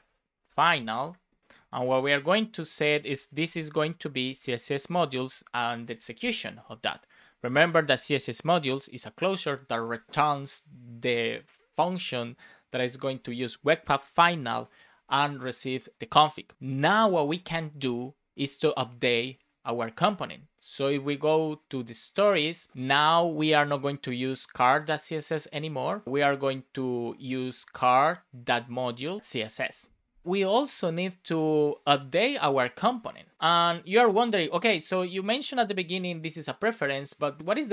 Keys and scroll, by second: 0.4 shift+f, 1.0 BackSpace, 1.6 shift+;, 1.9 space, 4.3 Return, 5.1 shift+9, 5.8 super+s, 29.6 Return, 30.2 super+s.